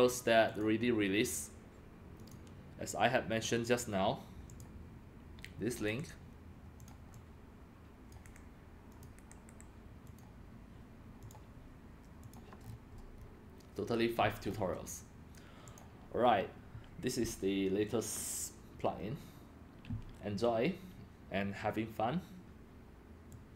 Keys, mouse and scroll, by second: 0.4 click, 2.2 click, 4.5 click, 5.9 ctrl+c, 6.8 click, 7.1 click, 8.2 ctrl+c, 8.9 click, 9.0 drag, 9.2 ctrl+v, 9.5 Return, 10.1 click, 11.2 click, 12.2 click, 12.6-14.4 scroll down 9, 14.4-14.9 scroll up 5, 15.7 click, 16.3-19.3 drag, 23.3 click.